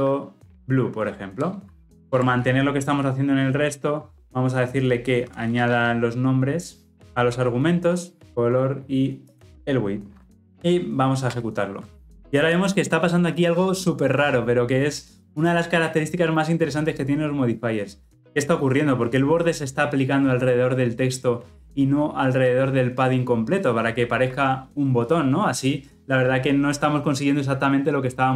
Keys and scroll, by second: 1.3 Return, 2.0 alt+Return, 9.4 alt+Return, 10.2 ctrl+alt+o.